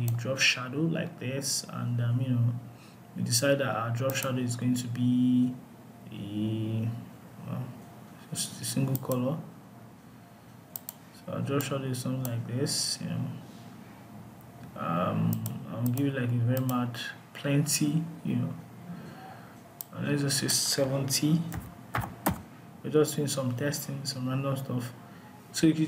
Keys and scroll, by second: 21.7 Return.